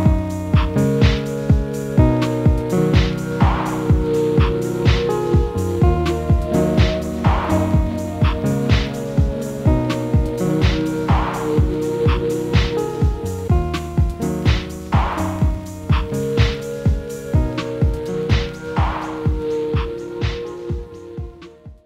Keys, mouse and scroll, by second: 0.4 ctrl+a, 2.5-6.8 typing, 8.7-9.4 typing, 11.1-11.9 typing, 12.8 double click, 18.0 Right, 18.5 Left, 19.0 Right, 19.4 Left, 20.9 Right.